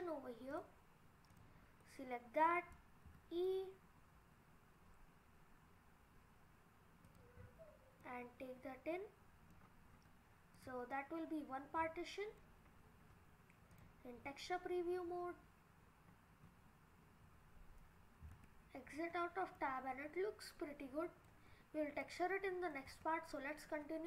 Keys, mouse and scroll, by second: 0.5 click, 1.3 click, 1.8 middle click, 3.1 e, 7.4-8.0 scroll up 4, 8.0 middle click, 8.5 middle click, 9.1 middle click, 9.6-10.4 scroll down 7, 10.6 click, 11.0 middle click, 12.8-13.6 scroll up 5, 16.8 click, 16.8 scroll down 3, 17.6-18.3 scroll down 3, 18.3 Tab, 19.1-19.8 scroll down 2, 19.8 middle click, 21.7-22.3 scroll up 4, 22.3 middle click, 22.9 Tab.